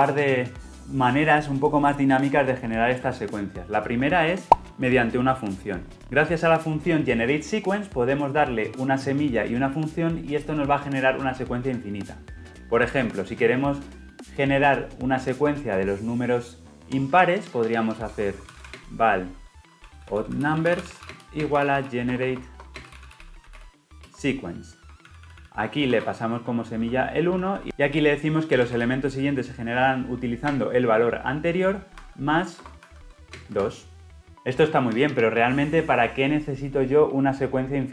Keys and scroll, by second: 24.0 Return.